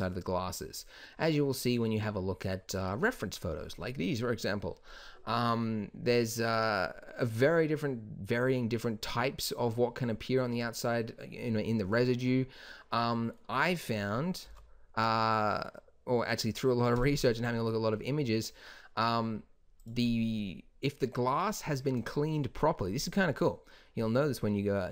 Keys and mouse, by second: 12.6-14.4 middle drag, 14.4 shift+a, 21.0-24.9 drag.